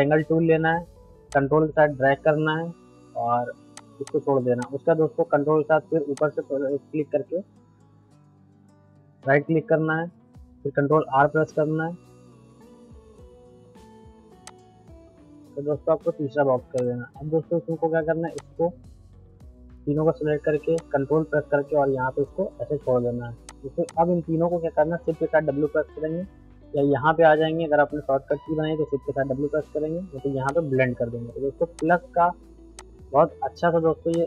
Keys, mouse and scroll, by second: 1.3-3.8 ctrl+drag, 6.2-9.4 ctrl+drag, 9.4-11.5 ctrl+right drag, 11.5 ctrl+r, 13.9 right click, 14.5-18.3 drag, 20.8-22.8 ctrl+drag, 22.9 ctrl+right click, 23.5-30.5 drag, 30.5 click, 31.7-34.1 shift+drag, 34.1-34.2 shift+drag.